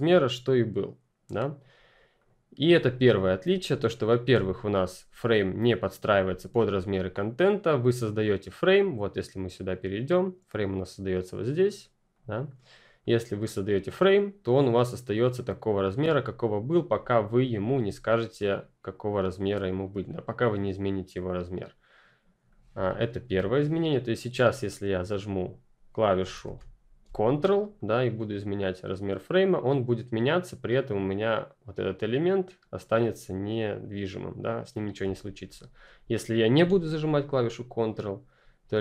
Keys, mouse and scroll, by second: 1.2 click, 7.3 click, 12.0 click, 18.4 click, 23.2 Delete, 23.5 click, 26.3 ctrl+z, 27.7 ctrl+click, 35.0 ctrl+z, 37.3 z, 37.3 click.